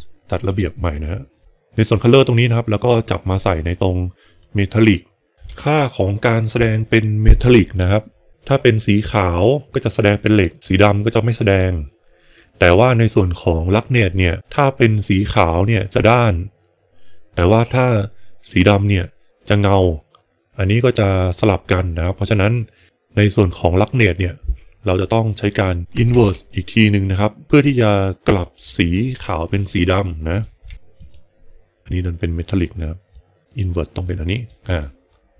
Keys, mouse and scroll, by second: 1.4-4.3 drag, 26.0 shift+a, 31.8-32.5 drag, 33.2 click, 33.9 click.